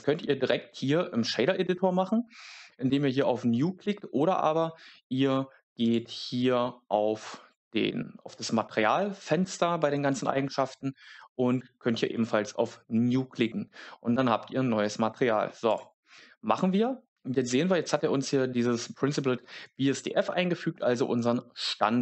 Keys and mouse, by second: 15.7 click.